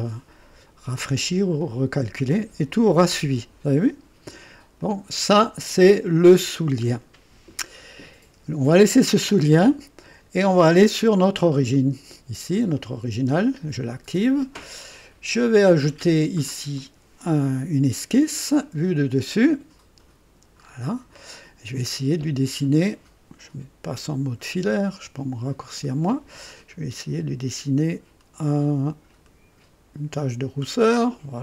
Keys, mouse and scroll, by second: 1.6 click, 4.7 click, 11.5-11.8 scroll up 2, 12.5 click, 16.7 click, 18.6 click, 19.3 click, 20.5-21.0 scroll up 2, 21.3 right click, 24.5 &, 25.6 click, 29.0 click, 30.7 click.